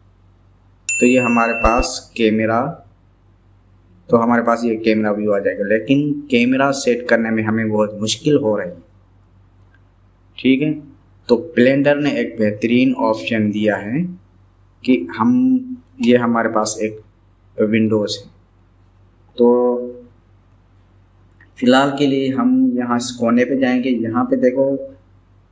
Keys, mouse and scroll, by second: 0.1 KP_0, 7.8 KP_0.